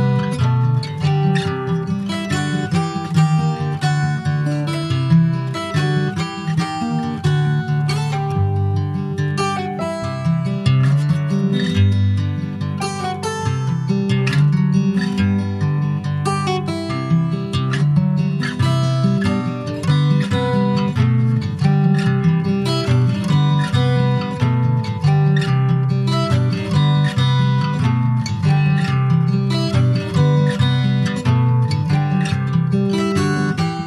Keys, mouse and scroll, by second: 0.7 middle click, 1.1-1.6 scroll up 2, 1.6 scroll down 3, 1.8 Tab, 2.1 click, 2.4 scroll down 1, 2.7 middle click, 3.3 ctrl+s, 3.4 scroll down 4, 3.7-4.9 shift+middle drag, 4.9 ctrl+s, 5.0 ctrl+click, 5.2-6.5 middle drag, 6.5 ctrl+s, 6.6 click, 6.9 shift+middle click, 7.8 ctrl+s, 9.3 click, 10.1-11.4 middle drag, 11.4 ctrl+s, 11.5 click, 12.1 shift+click, 12.8 shift+click, 14.2 ctrl+j, 14.5 ctrl+click, 14.8 middle click, 15.3 ctrl+s, 15.4 ctrl+click, 15.8 shift+middle click, 16.1 click, 16.4 middle click, 16.9 ctrl+s, 19.1-20.3 middle drag, 20.3 shift+a, 21.7 alt+middle click, 22.1 alt+middle click, 23.0 ctrl+s, 23.3 click, 24.4 alt+middle click, 24.5-25.3 alt+scroll up 7, 25.3 alt+middle click, 25.6 scroll down 1, 26.0 shift+middle click, 26.9 click, 27.9 alt+middle click, 28.4-28.7 scroll up 2, 28.7 shift+middle click, 29.4 click, 31.8 scroll down 2, 32.0 middle click, 32.5 ctrl+s, 32.7 click, 33.3 middle click.